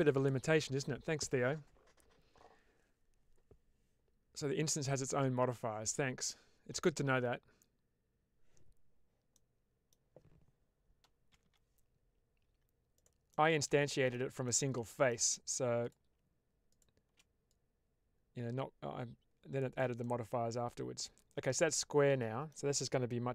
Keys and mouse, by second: 9.3 middle click, 11.2 g, 11.3 g, 12.8 click, 13.2 middle click, 13.7 shift+middle click, 14.3 middle click, 15.7 click, 17.4-19.7 drag, 19.9-22.5 middle drag.